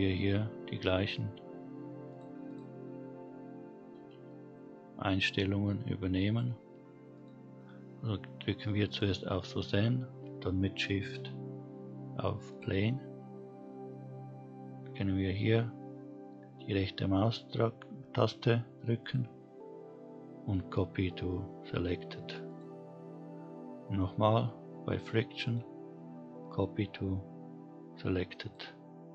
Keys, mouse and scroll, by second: 0.8 click, 1.1 click, 4.9 shift+click, 5.8 click, 7.5 click, 11.2 shift+click, 17.7-28.5 right drag, 28.5 click.